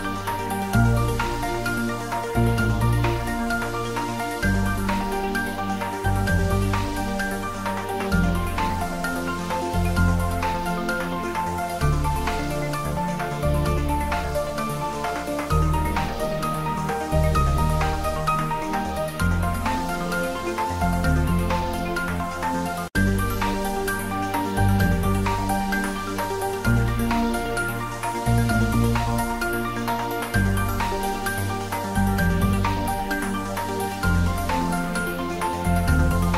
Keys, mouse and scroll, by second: 2.4 click, 4.1-5.4 typing, 6.0 Return, 9.0 click, 19.9 shift+Num_Lock, 20.0 shift+a, 27.2 click, 29.4 g, 32.5 click, 33.4 s, 34.6 click.